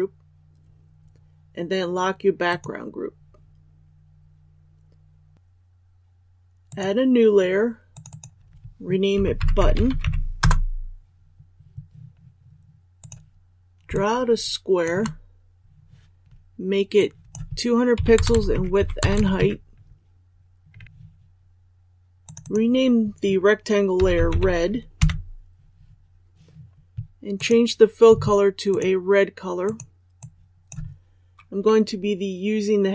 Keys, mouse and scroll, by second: 10.3 Return, 12.9 click, 13.9 shift+click, 16.9 click, 18.5 Tab, 22.2-32.9 drag.